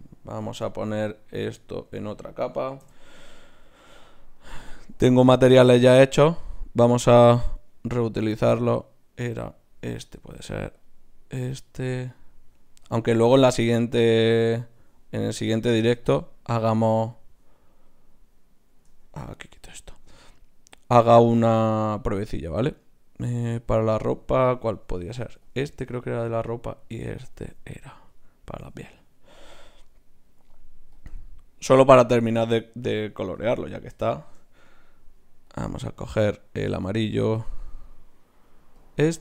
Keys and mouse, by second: 0.7 right click, 1.4 Tab, 2.8 m, 4.4-8.1 drag, 5.5 right click, 10.2-20.3 right drag, 10.8-15.3 drag, 16.1-18.7 drag, 18.9 Tab, 20.3-22.1 drag, 26.5-28.2 right drag, 27.3-29.4 drag, 29.9-39.2 right drag, 30.9-33.0 drag, 35.5-39.2 drag.